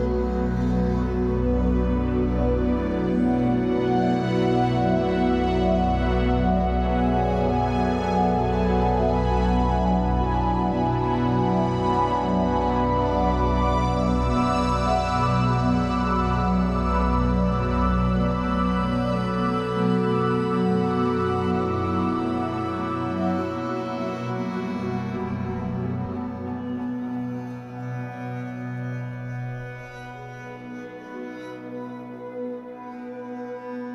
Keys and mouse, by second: 0.0-1.0 typing, 1.5-3.2 ctrl+alt+drag, 3.8 click, 5.8 click, 6.3 click, 6.9 click, 8.2 typing, 12.4 click, 13.6 click, 14.2 Delete, 14.8 click, 16.1 Delete, 16.7 click, 17.5 ctrl+alt+click, 17.9-20.5 ctrl+alt+drag, 20.4 Tab, 21.2-22.4 alt+drag, 23.4-24.6 drag, 28.3 click, 29.0 click, 29.7 alt+click, 30.4 click, 31.4 alt+click, 32.2 click.